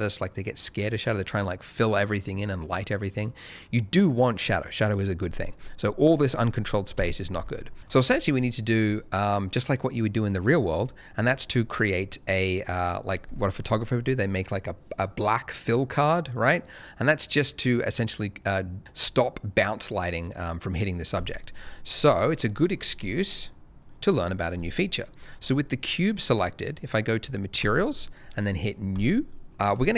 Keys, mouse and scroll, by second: 6.9 Escape, 10.1 middle click, 10.7-11.3 scroll down 1, 11.3 scroll up 1, 11.5 middle click, 11.9 scroll down 1, 21.6 scroll down 1, 22.4 middle click, 22.7 scroll down 1, 24.5 click, 24.7 double click, 27.6 click.